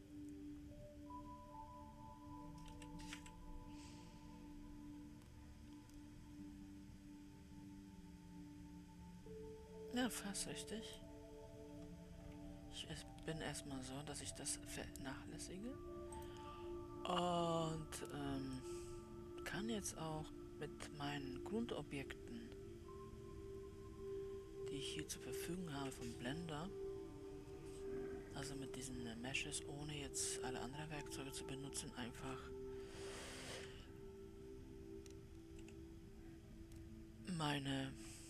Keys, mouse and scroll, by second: 2.9 f, 3.5 g, 13.2-14.4 scroll down 4, 17.0-19.7 drag, 29.1-34.1 middle drag, 34.1 w, 36.0 KP_7.